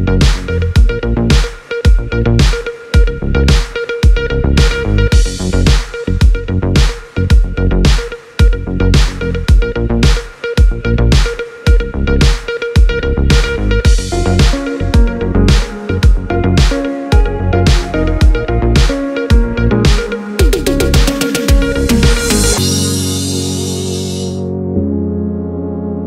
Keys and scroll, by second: 1.1 space.